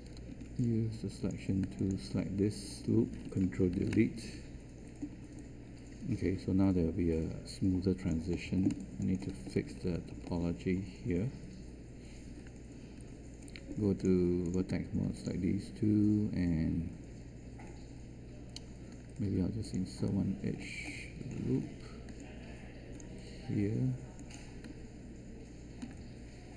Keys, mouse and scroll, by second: 0.3 q, 3.6 ctrl+Delete, 13.0 1, 25.8 1.